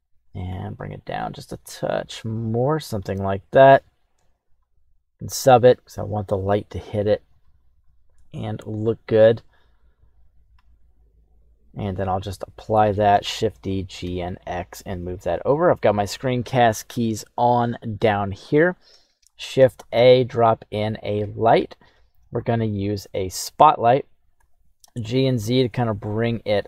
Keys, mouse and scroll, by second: 0.5 g, 3.5-4.6 drag, 5.4-7.5 drag, 10.3 click, 11.3 click, 12.0 click, 13.4 shift+d, 17.9 middle click, 19.3 shift+a, 23.3 middle click, 23.7-24.3 scroll down 1, 24.3-25.3 scroll down 2, 24.3 g.